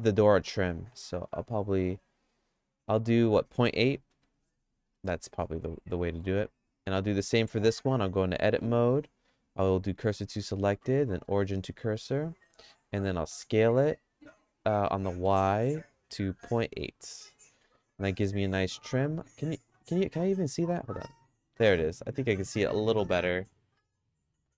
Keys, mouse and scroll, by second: 5.9 middle click, 6.7 middle click, 7.6 Tab, 9.0 q, 10.3 Tab, 10.7 q, 12.0 Tab, 12.4 Tab, 13.1 s, 18.8 middle click, 19.2 shift+middle click, 21.6 middle click, 21.9-24.5 shift+middle drag.